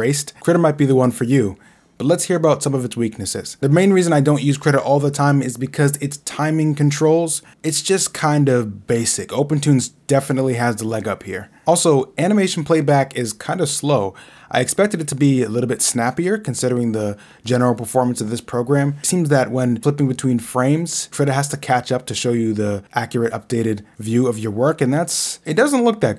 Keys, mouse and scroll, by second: 0.1 click, 1.3 scroll down 2, 1.5 scroll, 2.3 scroll, 2.5 scroll down 1, 4.4 scroll, 4.7 scroll down 1, 4.9 scroll, 5.0 scroll down 1, 5.1 scroll down 1, 5.9-6.2 scroll, 5.9 Left, 8.4 Left, 9.7 Right, 9.7 Left, 10.6 Right, 11.6 Right, 12.5 click, 13.7 Right, 15.1 Left, 15.8-16.1 scroll, 17.5 scroll, 18.6-18.9 scroll, 19.5 scroll, 20.9 scroll, 21.9 right click, 23.1 click.